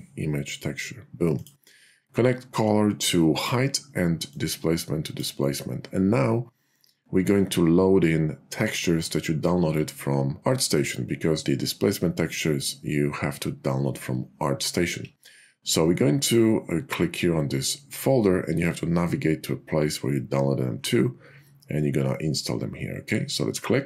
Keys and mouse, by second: 2.6 click, 4.2-5.2 drag.